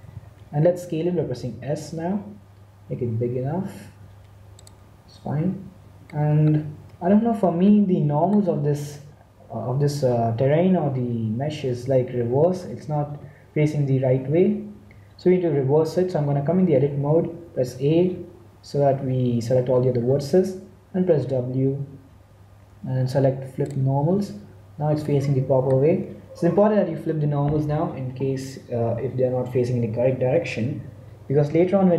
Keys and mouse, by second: 0.0 t, 1.4 s, 6.0 middle click, 11.6 Tab, 12.8 a, 13.0 a, 17.4 a, 18.2 a, 21.1 w, 24.1 Tab, 24.9 middle click.